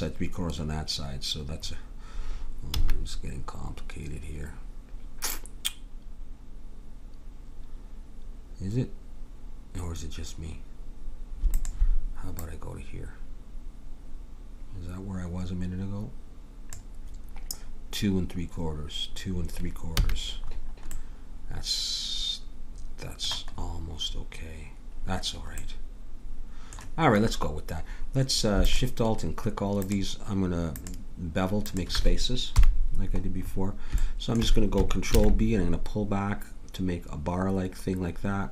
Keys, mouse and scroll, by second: 2.7 a, 11.5-14.2 drag, 20.0 a, 20.4-21.5 middle drag, 21.9-22.9 middle drag, 23.5-28.6 middle drag, 28.6-32.5 drag, 32.5 KP_1, 33.5 middle click, 35.1 ctrl+b.